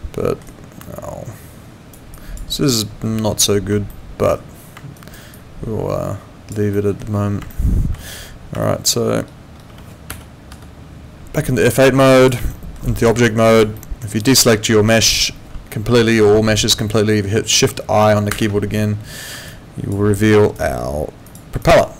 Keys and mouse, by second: 0.4 alt+right click, 2.1 alt+click, 3.9 alt+middle click, 5.0 alt+right click, 5.3 alt+click, 6.7 alt+middle click, 7.5 alt+middle click, 8.6 alt+middle click, 10.1 F9, 12.1 click, 12.5 alt+middle click, 13.0 click, 13.3 alt+click, 13.7 alt+middle click, 14.2 alt+click, 18.3 shift+i, 19.5 alt+click, 20.1 alt+middle click, 20.4 alt+right click, 21.2 click, 21.6 alt+click.